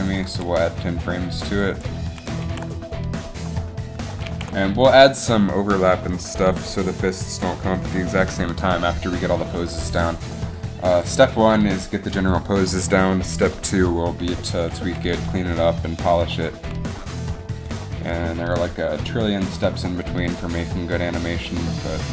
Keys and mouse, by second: 0.4 g, 2.6 alt+a, 4.5 alt+a, 11.0-17.0 drag.